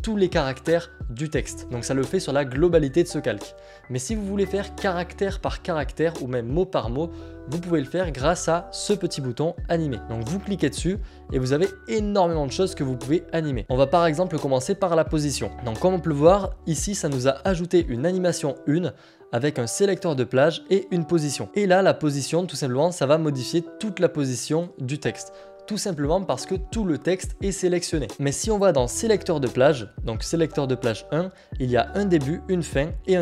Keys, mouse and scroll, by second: 10.4 click, 16.6 click, 18.2 click, 20.2 click, 22.9 click, 25.7 click, 29.2 click.